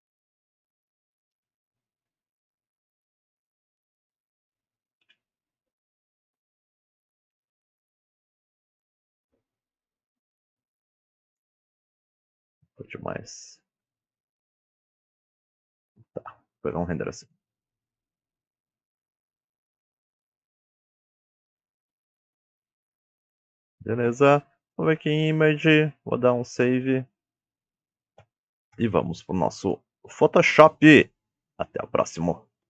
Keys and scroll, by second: 0.0-0.1 typing, 2.1 Return, 2.1 KP_0, 2.8 5, 3.0 Return, 3.7 KP_7, 4.1 g, 10.3 g, 13.0 g, 27.6-28.5 typing.